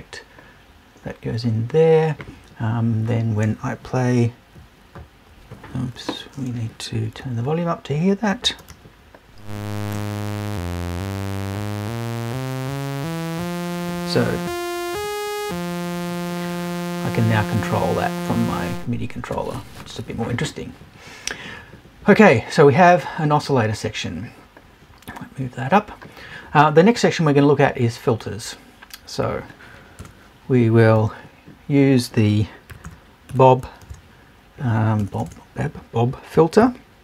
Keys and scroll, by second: 30.0 BackSpace, 30.8 super+BackSpace.